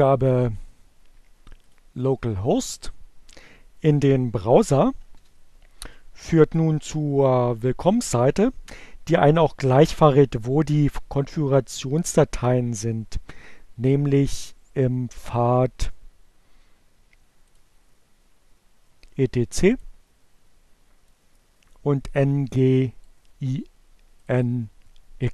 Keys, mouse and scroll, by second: 1.5 click, 3.5 click, 6.1 Return, 19.5 click, 21.4 click, 23.1-25.0 drag.